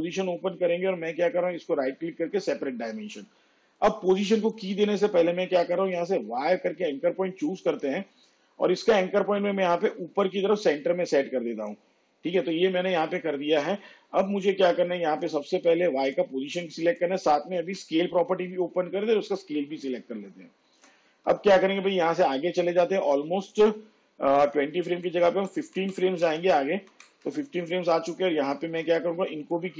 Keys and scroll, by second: 6.1 y, 17.7 shift+s, 21.8 shift+Page_Down, 25.0 ctrl+Left.